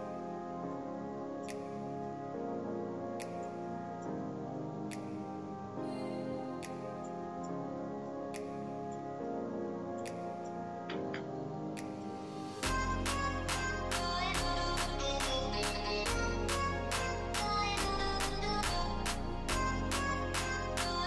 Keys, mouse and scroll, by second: 10.6 scroll, 10.8 typing.